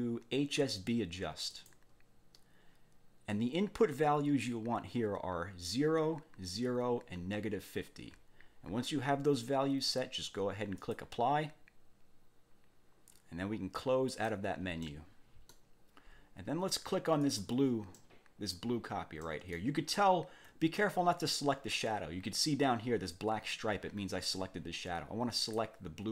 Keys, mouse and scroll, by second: 1.5 click, 3.3-4.6 drag, 10.8 click, 14.1 click, 14.9 middle click, 15.5 click, 17.2 click, 17.9 click, 19.2 click, 19.9 ctrl+scroll up 2, 25.3 click.